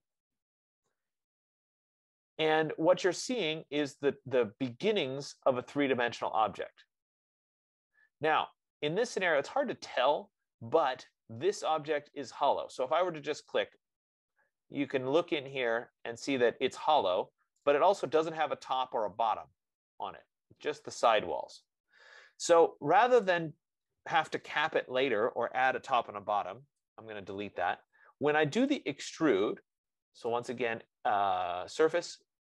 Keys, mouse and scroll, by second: 3.0 Return, 14.1 click, 15.4-16.2 scroll, 21.1 F15, 21.4 right click, 23.7 click, 27.1 BackSpace, 29.0 click, 30.9 click.